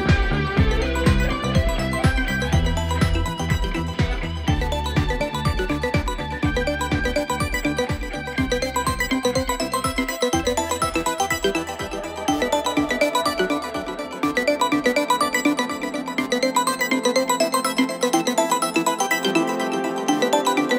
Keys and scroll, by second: 4.7 F3, 7.7 4, 8.3 F9, 10.3 3, 15.8 ctrl+z, 18.1 ctrl+z.